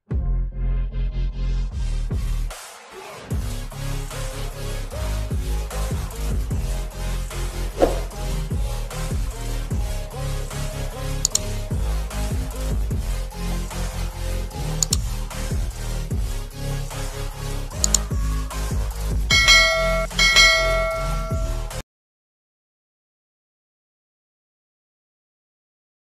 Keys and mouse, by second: 0.2 click, 1.3 Up, 1.6 Left, 2.9 ctrl+h, 6.6 t, 15.6 shift+Up, 17.0 shift+Up, 17.4 click, 25.1 click, 26.1 ctrl+s.